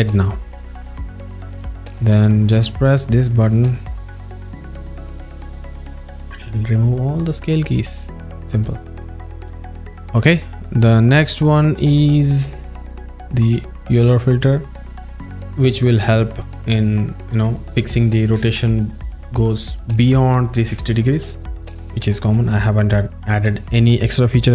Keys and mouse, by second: 0.3 click, 0.6 click, 2.9 alt+middle click, 5.5 click, 8.6 click, 8.9 click, 12.4 a.